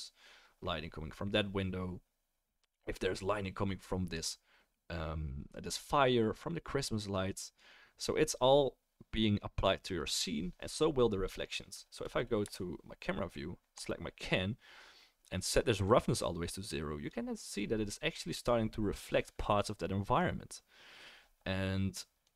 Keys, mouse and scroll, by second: 12.4 KP_0, 13.8-15.9 drag.